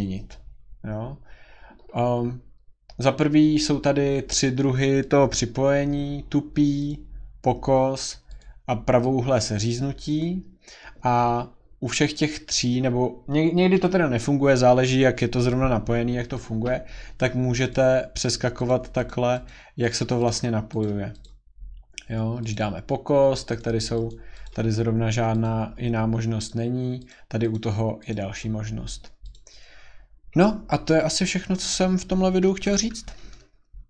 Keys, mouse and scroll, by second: 6.9 click, 8.4 click, 10.2 click, 17.7 click, 18.2 click, 18.7 click, 19.1 click, 19.4 click, 19.9 click, 20.2 click, 20.8 click, 21.2 click, 22.5 click, 23.6 click, 24.1 click, 24.4 click, 25.4 click, 26.5 click, 27.1 click, 27.5 click, 28.1 click, 29.3 click, 29.7 scroll.